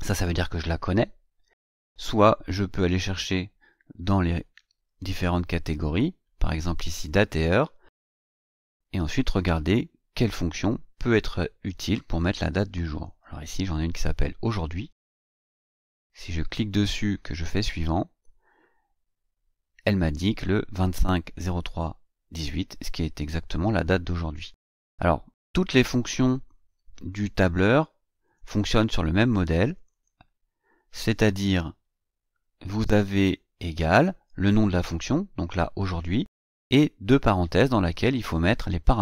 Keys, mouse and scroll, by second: 2.7 click, 7.0 click, 15.7 click, 17.6 click, 28.2 click, 29.7 click, 32.0 ctrl+scroll up 1, 32.6-33.2 ctrl+scroll up 2.